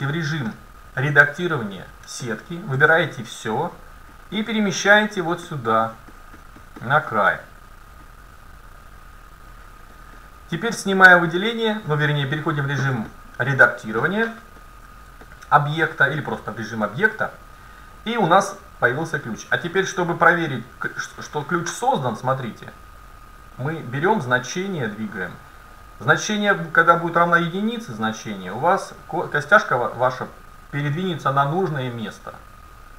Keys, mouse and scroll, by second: 1.5 scroll up 1, 1.5 middle click, 2.8 a, 4.1-5.9 drag, 5.9-9.4 middle drag, 8.1-9.9 drag, 10.0-11.5 middle drag, 10.6 Tab, 15.3-16.5 middle drag, 16.6-18.7 middle drag, 22.6-24.7 drag.